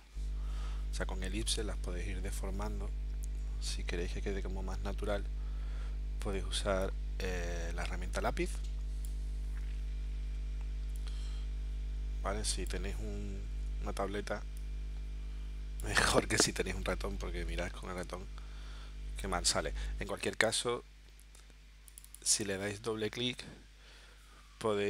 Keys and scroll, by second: 13.5 super+z, 17.3 super+z, 19.8 super+z.